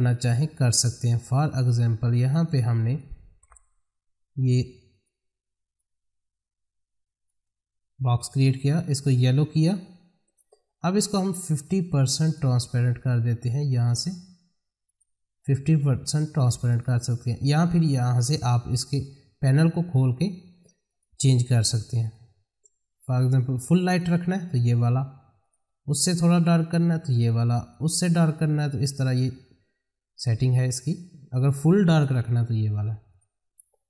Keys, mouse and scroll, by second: 2.5-8.8 drag, 10.2 right click, 12.2 click, 20.9 click.